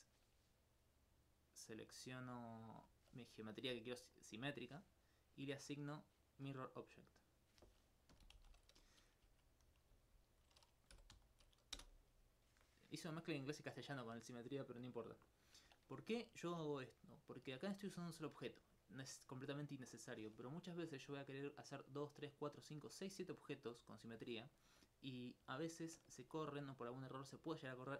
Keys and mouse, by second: 2.9 alt+click, 4.4 middle click, 6.7 click, 8.2-9.3 typing, 15.4 middle click, 21.2 right click, 24.6 alt+click, 25.6 alt+click.